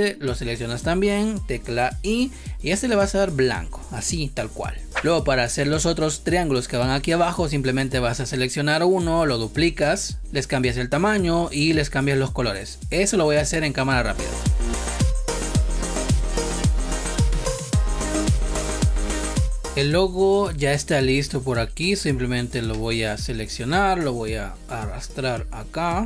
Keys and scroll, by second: 1.9 i, 4.3 v, 4.9 space, 14.4 ctrl+c, 14.6 space, 16.9 ctrl+z, 17.2 ctrl+z, 18.1 space, 18.4 space, 19.0 ctrl+c, 19.1 ctrl+v, 19.3 space, 19.7 space.